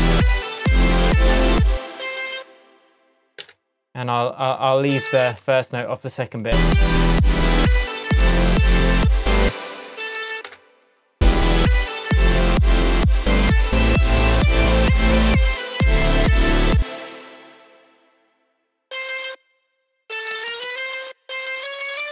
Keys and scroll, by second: 1.6 space, 3.4 BackSpace, 9.4 space, 16.7 space, 20.3 Up.